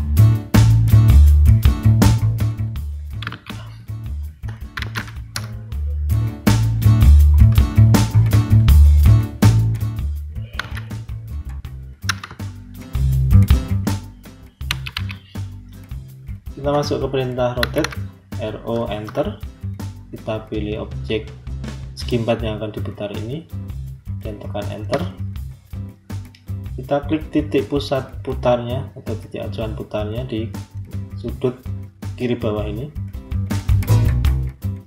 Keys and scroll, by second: 3.1 Escape, 4.4-5.3 typing, 7.5 Return, 10.5 r, 12.1 Return, 14.5 Escape, 17.2-18.2 typing, 18.8 Return, 24.8 Return.